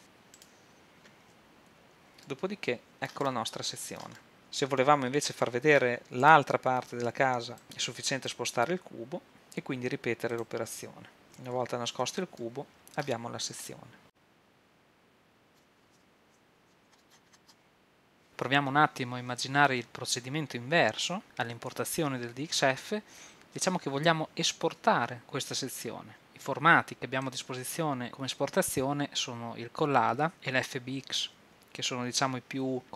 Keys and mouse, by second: 0.4-4.4 right drag, 1.8 h, 4.4 z, 5.1-8.2 right drag, 8.2 click, 9.3-10.4 drag, 11.2-13.4 drag, 12.1 h, 15.6 KP_1, 16.0 KP_3, 16.6 shift+z, 27.2 click.